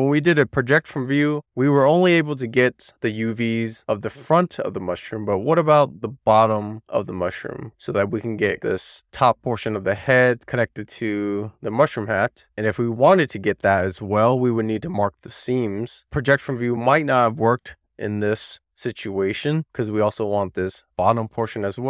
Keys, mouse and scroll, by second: 0.2 Tab, 1.5 middle click, 2.3 shift+middle click, 2.7 a, 3.2 Tab, 3.7 Tab, 4.3 a, 4.7 middle click, 6.1 click, 10.1-10.8 scroll down 1, 10.8-11.4 scroll up 1, 11.4 a, 12.6 Tab, 13.5 middle click, 14.1 shift+middle click, 14.5 middle click, 15.6 click.